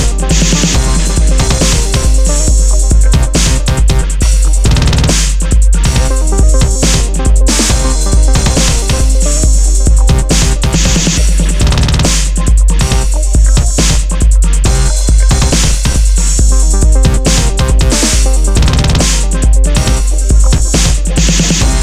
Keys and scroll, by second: 3.8 super+d, 5.3 super+d, 11.9 alt+shift+super+e, 14.4 alt+shift+super+e, 15.9 Return, 16.5 alt+BackSpace, 16.8 super+t, 18.1 Return, 19.0 super+i.